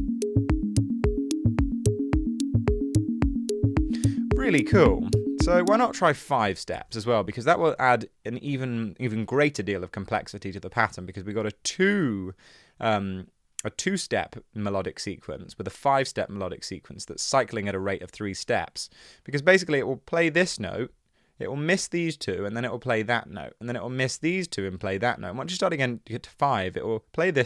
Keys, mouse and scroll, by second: 5.9 space, 6.4 5, 6.7 Return, 6.8 BackSpace, 7.9 super+z.